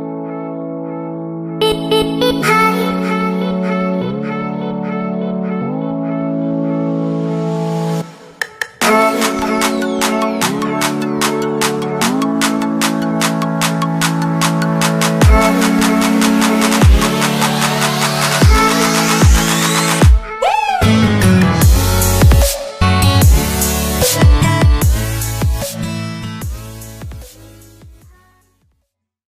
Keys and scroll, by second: 6.7 space, 18.2 ctrl+-.